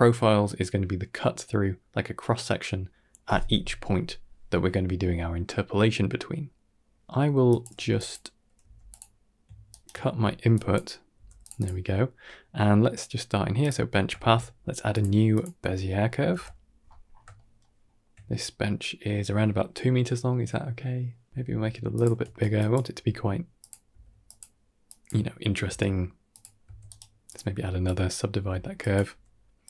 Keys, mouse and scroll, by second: 7.0 middle click, 7.3 click, 7.6 g, 8.5 g, 9.6 ctrl+right click, 10.0 middle click, 10.5 drag, 11.0 g, 11.4 click, 12.5-12.8 middle drag, 13.5 click, 14.0 shift+a, 16.2 KP_7, 16.9 scroll up 2, 17.2 shift+middle drag, 17.7 shift+middle drag, 21.1 s, 22.1 Tab, 22.4 click, 22.8 r, 23.8 s, 24.7 click, 25.8 s, 26.5 a, 26.7 right click, 27.7 click, 28.2-29.6 typing, 28.6 click.